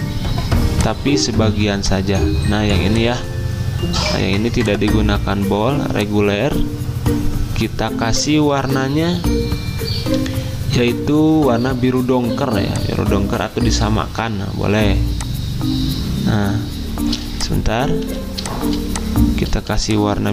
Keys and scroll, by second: 18.1 z.